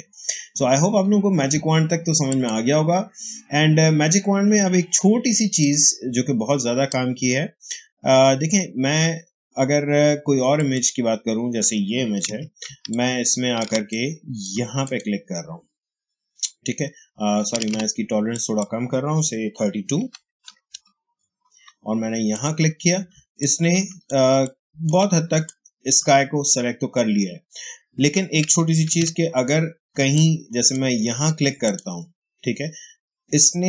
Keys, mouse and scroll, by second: 5.5 click, 5.5-9.4 drag, 10.5 click, 12.2 ctrl+d, 12.6 ctrl+space, 12.8 ctrl+click, 13.0 ctrl+space, 13.8 click, 14.1 space, 14.8 click, 17.5 ctrl+z, 18.2 click, 19.9 typing, 20.6 Return, 22.2 click, 23.0 space, 23.3 click, 23.5 space, 24.3-28.3 ctrl+drag, 24.6 ctrl+h, 25.7 h, 28.4 click, 28.8 ctrl+d, 29.9 space, 30.0 click, 30.4 space, 31.6 click.